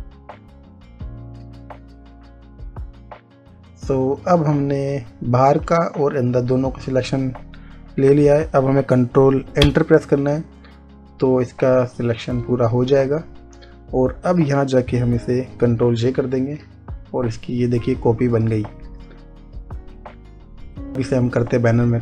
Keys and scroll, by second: 1.8 ctrl+z, 10.1 ctrl+Return, 16.4 ctrl+j, 20.9 space.